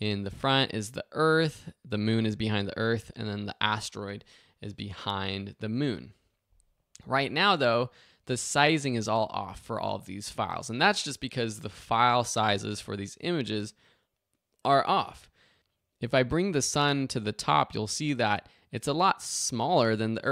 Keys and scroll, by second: 15.5 super+z, 20.2 super+z.